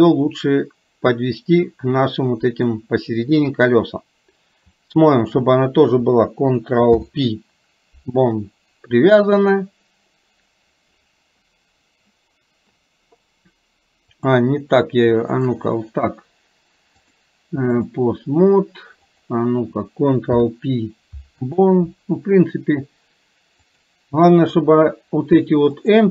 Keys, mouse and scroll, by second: 5.3 shift+click, 7.1 ctrl+p, 14.2 click, 15.4 shift+click, 17.2 click, 20.3 ctrl+p, 23.7-24.7 drag, 25.8 click.